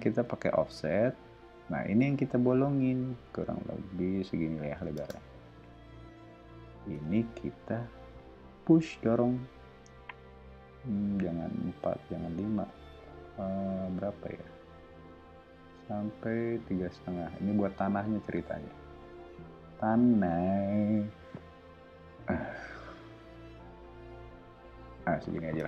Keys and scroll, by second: 0.1 f, 4.9 space, 6.9 p, 25.5 space.